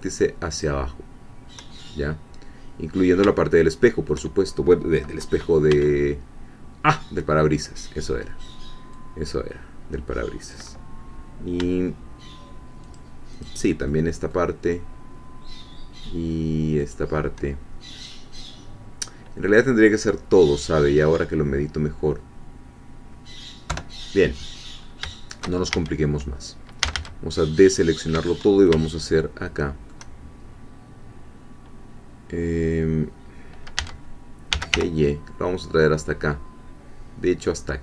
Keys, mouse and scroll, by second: 0.5 shift+click, 2.8-3.4 scroll down 1, 3.4 shift+middle click, 5.7 b, 8.9-10.7 drag, 13.0 shift+click, 13.9 shift+middle click, 16.9 shift+click, 23.7 3, 24.8-25.1 scroll up 1, 25.1 shift+middle click, 25.4 shift+click, 25.7 shift+a, 26.8 a, 28.9-30.5 shift+middle drag, 33.5-33.8 scroll down 2, 33.8-35.2 typing.